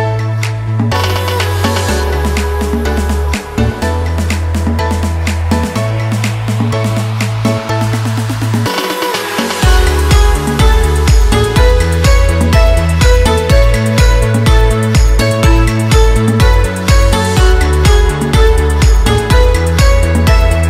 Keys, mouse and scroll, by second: 0.0 ctrl+t, 0.8 click, 2.1 Return, 3.2-3.9 scroll down 3, 4.4-5.0 scroll down 1, 5.0 t, 6.1 click, 9.5 click, 9.5-11.9 drag, 14.5 shift+o, 14.8 shift+f, 16.6 click, 18.7 alt+click.